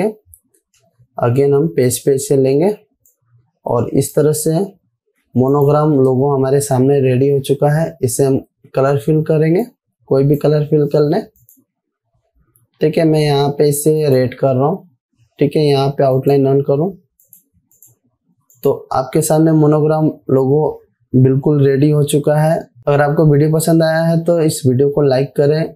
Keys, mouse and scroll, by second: 0.0 ctrl+g, 1.9 Left, 2.3 click, 3.0 z, 3.5-4.8 drag, 5.7 v, 6.0 click, 10.1-11.0 drag.